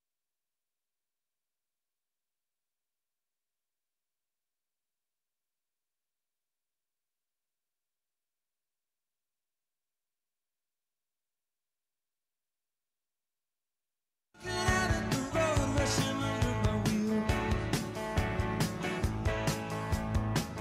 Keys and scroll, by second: 14.4 space.